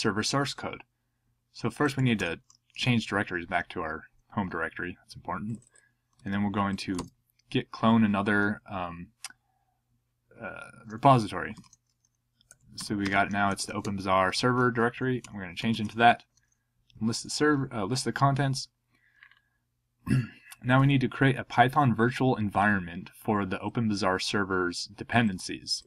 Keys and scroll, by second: 1.7-2.6 typing, 2.7 Return, 6.2 super+c, 7.0 super+v, 11.3-14.1 typing, 15.2 Return, 15.3-16.0 typing.